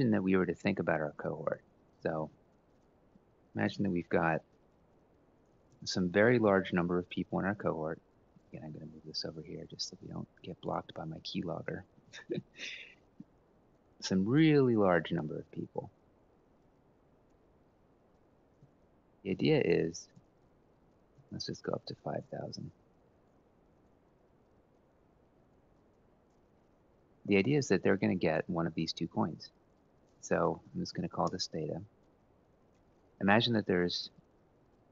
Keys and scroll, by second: 0.9-5.7 typing, 6.0 Up, 6.3 ctrl+c, 8.6 ctrl+x, 8.8-10.0 typing, 11.7 ctrl+c, 12.6 shift+Page_Down, 13.1 shift+Page_Down, 13.2 shift+Page_Down, 14.2 shift+Page_Down, 14.8 shift+Page_Down, 15.4 shift+Page_Down, 16.0 shift+Page_Down, 18.4 ctrl+v, 18.8 Down, 19.7 ctrl+c, 20.0 shift+Down, 20.1-20.8 shift+Down, 20.9 ctrl+v, 21.3 Down, 21.8 ctrl+c, 22.0 shift+Down, 22.2 shift+Down, 22.3 shift+Down, 22.5 shift+Down, 22.7 shift+Down, 22.9 shift+Down, 23.1 ctrl+v, 23.9 Down, 24.5 ctrl+c, 25.0 Down, 25.2 ctrl+v, 25.4 Up, 25.8 Up, 26.0 Up, 30.1-31.2 typing, 33.9 =.